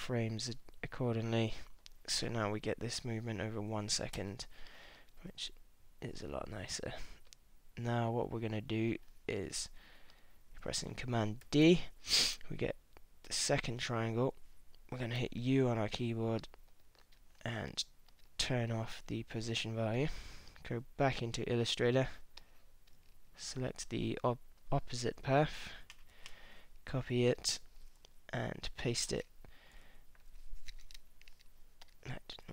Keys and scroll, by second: 2.3 space, 4.2 space, 6.6 space, 11.4 super+d, 15.2 u, 26.1 super+c, 29.8 shift+super+v.